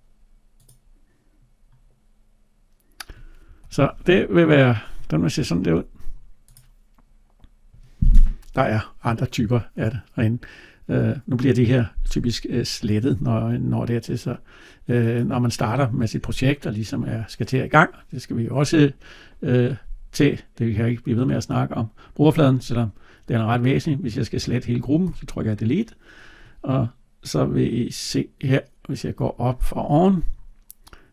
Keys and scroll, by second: 3.3 Escape, 24.8 Delete.